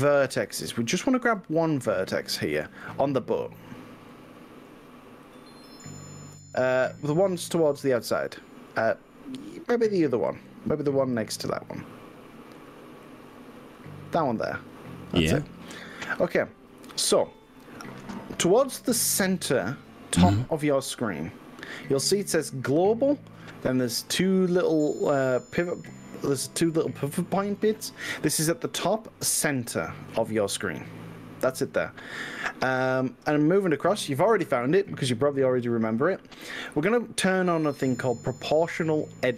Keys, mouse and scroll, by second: 3.0 click, 4.1-4.8 middle drag, 5.4 click, 6.5 click, 8.0-10.7 middle drag, 11.1-12.7 middle drag, 13.1-13.9 drag, 14.5-19.3 middle drag, 21.1-24.1 middle drag.